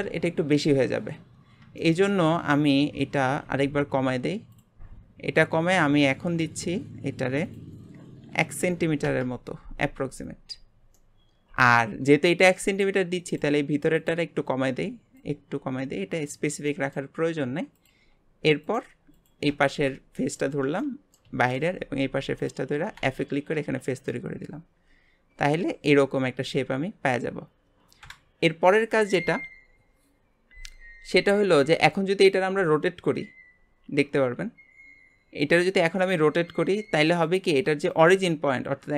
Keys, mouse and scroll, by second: 1.8-3.3 shift+middle drag, 3.3 g, 5.8 click, 7.4-10.5 drag, 10.9-13.3 middle drag, 13.3 click, 15.1 click, 16.6-17.7 middle drag, 17.7-18.7 drag, 19.1 click, 20.1 middle click, 20.5 scroll down 2, 20.8-22.4 middle drag, 22.4 shift+click, 23.0 f, 23.5 Tab, 24.1-27.1 middle drag, 28.0 KP_Divide, 30.9 scroll down 1, 31.3-31.8 middle drag, 31.8-32.3 scroll down 2, 32.3 r.